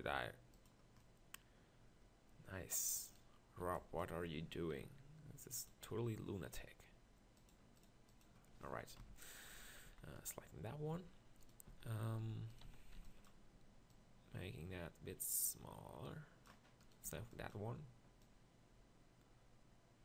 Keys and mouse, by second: 0.9-3.1 drag, 3.6 b, 4.7 m, 7.4-9.0 drag, 9.0 KP_1, 9.5 z, 9.9 z, 10.9 Tab, 11.7 z, 12.2 b, 12.6 z, 12.9 b, 17.1 b.